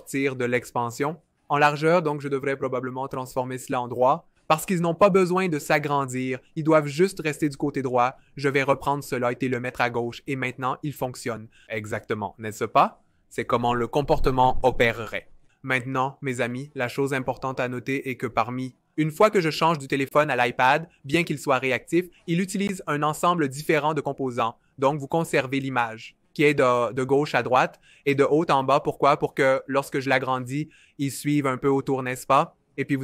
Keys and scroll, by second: 17.8 v.